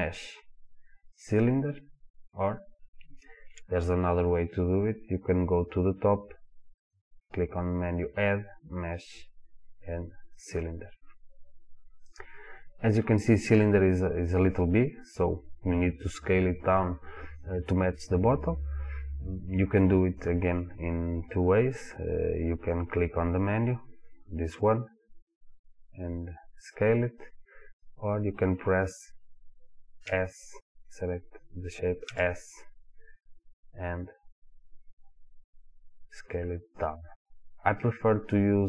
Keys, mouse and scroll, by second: 3.5 Delete, 6.9-27.0 drag, 27.8 click, 30.1 s, 30.7 click, 32.1 s, 37.2 click.